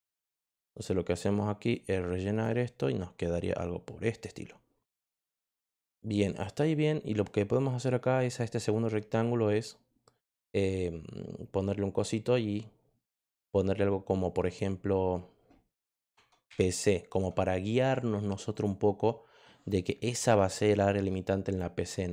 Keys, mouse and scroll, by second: 0.6 click, 1.6 click, 6.6 click, 10.2 click, 14.1 click, 14.4 click, 16.1 Caps_Lock, 16.2-17.1 typing, 18.5 click.